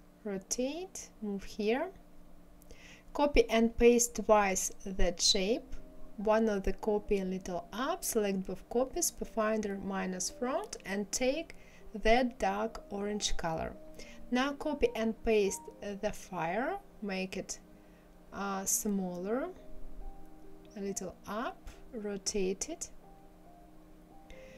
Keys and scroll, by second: 2.9 ctrl+c, 3.4 ctrl+f, 4.2 ctrl+c, 4.7 ctrl+f, 14.5 ctrl+c, 15.3 ctrl+f.